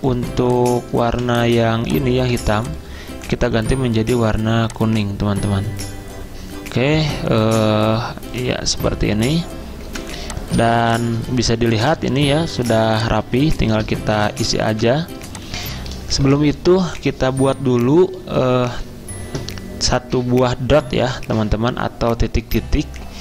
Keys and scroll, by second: 1.1 v, 9.9 v, 11.3 z.